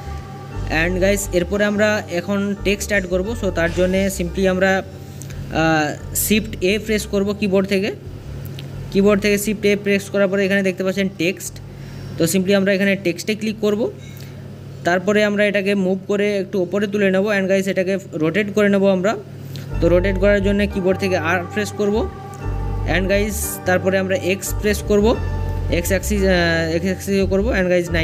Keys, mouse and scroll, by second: 1.8 click, 2.1 middle click, 2.6 scroll up 3, 2.9 scroll down 1, 3.1-13.6 middle drag, 15.5 click, 18.2-21.1 middle drag, 21.1-22.2 scroll up 1, 22.2-23.3 scroll up 1, 23.3 r.